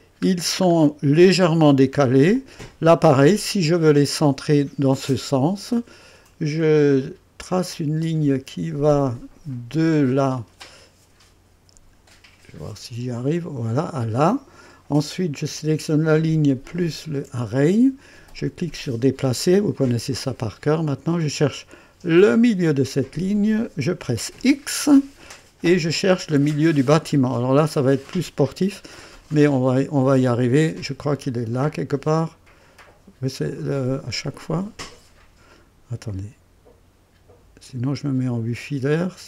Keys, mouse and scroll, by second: 0.0-0.6 typing, 0.3 scroll down 1, 0.8 right click, 1.5-1.8 scroll up 1, 2.3 click, 3.4 scroll up 1, 3.8-4.5 right drag, 4.4 typing, 7.0 click, 10.0 click, 13.3 click, 16.8 ctrl+click, 18.7 click, 22.4 click, 24.4 x, 27.9 click, 35.5 click.